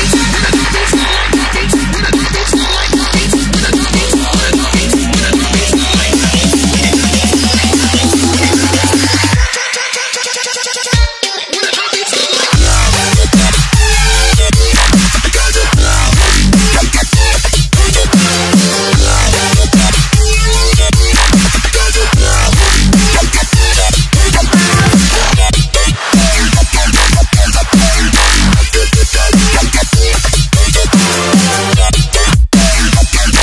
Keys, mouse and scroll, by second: 3.5 Return, 4.0 click, 7.2 click, 7.5 Delete, 9.4 alt+scroll down 1, 9.7-10.2 alt+scroll up 3, 10.4 scroll down 1, 11.4 t, 11.5 click, 14.5 Return, 15.2 scroll down 1, 15.6 click, 18.5 click, 23.5 s, 24.7 click, 29.8 z, 30.3 s, 31.2 click.